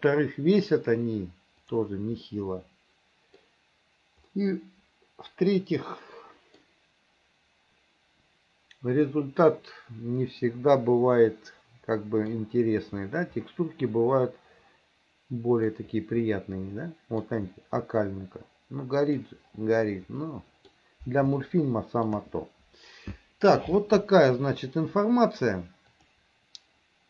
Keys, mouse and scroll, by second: 1.8 click, 2.3-3.5 middle drag, 4.3 middle click, 5.3 middle click, 5.7 middle click, 6.2 middle click, 9.5-12.3 middle drag, 13.5-15.7 middle drag, 16.3-17.3 middle drag, 18.0-19.2 middle drag, 20.3 middle click, 21.5 shift+middle click, 26.0 click.